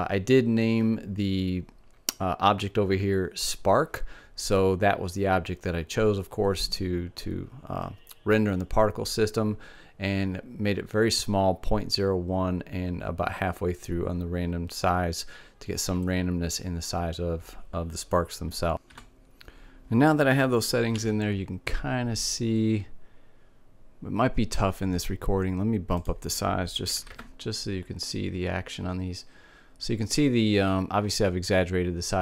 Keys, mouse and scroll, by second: 20.6 alt+a, 25.6-27.5 drag.